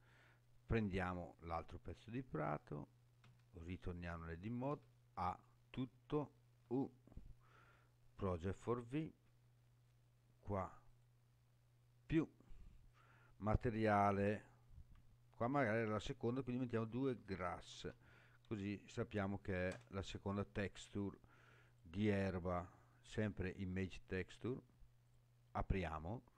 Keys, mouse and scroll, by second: 0.6 click, 3.2 Tab, 4.7 a, 6.6 u, 10.9 click, 12.9-20.8 drag, 17.8 s, 21.6-23.2 drag, 25.0 click.